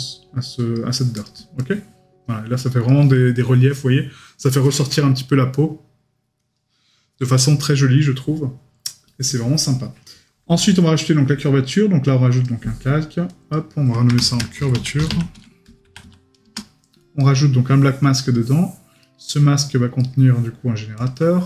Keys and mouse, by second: 17.2 right click, 19.0 right click.